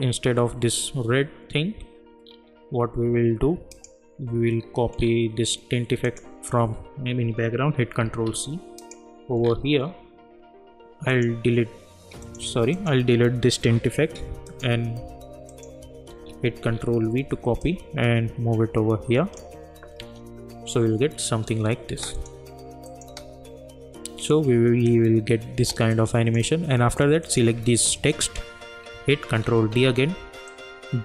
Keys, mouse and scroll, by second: 2.2 scroll down 1, 2.4-3.1 scroll up 1, 3.7 click, 4.6-5.0 scroll down 1, 6.0 click, 8.0 ctrl+c, 8.8 click, 9.4 scroll down 1, 11.1 click, 15.5 click, 16.0 ctrl+v, 16.7-17.6 scroll down 1, 17.9-19.5 drag, 20.0 space, 21.9 space, 22.1 click, 23.0 space, 25.6 space, 25.9-27.2 drag, 27.9 shift+click, 29.5 ctrl+d, 30.5-31.0 drag.